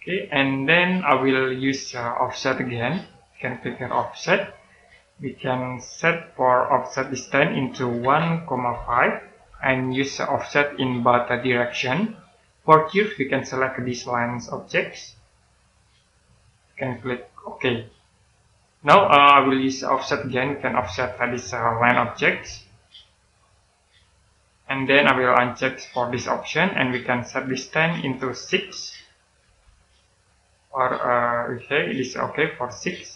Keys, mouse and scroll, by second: 0.3-1.1 scroll down 1, 1.1 middle click, 1.8-3.9 scroll up 1, 4.3 click, 6.9 click, 7.9 typing, 9.2 typing, 11.3 click, 15.2 click, 19.6 middle click, 20.2-21.1 scroll up 1, 22.3 middle click, 24.0 click, 29.3 6, 30.0 click.